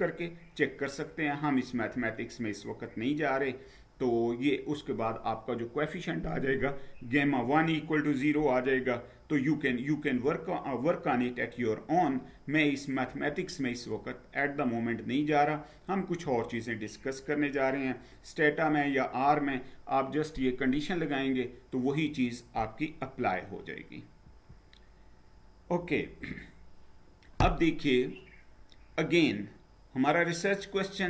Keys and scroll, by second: 1.8 Down, 16.0 Down, 24.2 Down.